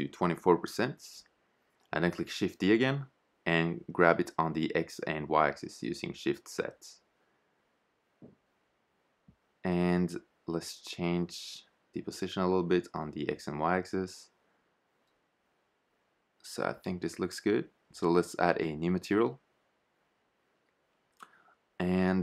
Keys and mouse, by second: 1.4 shift+d, 6.2 shift+z, 7.9 shift+z, 8.7 g, 13.5 shift+z, 19.5-22.2 drag.